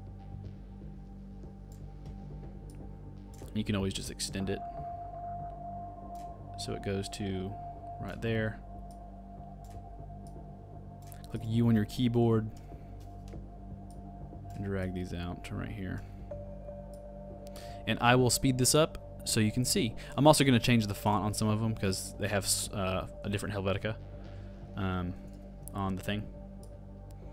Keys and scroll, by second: 25.3 super+c, 25.4 super+v.